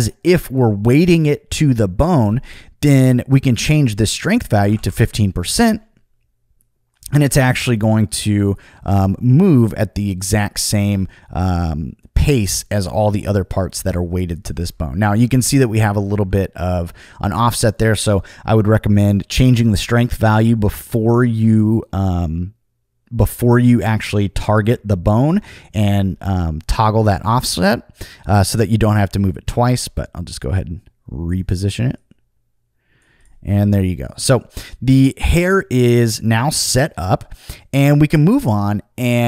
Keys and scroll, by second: 4.4-5.2 typing, 16.1 super+z.